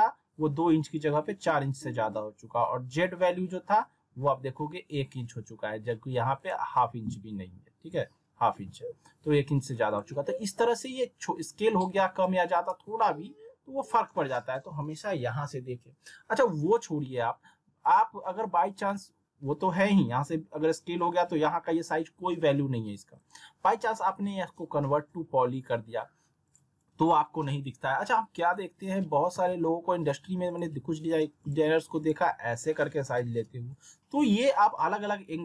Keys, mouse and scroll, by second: 6.4 click, 9.9 click, 16.5 w, 17.8 click, 23.2 right click, 26.4 click, 28.8 alt+w, 29.3 z, 30.5-35.4 drag.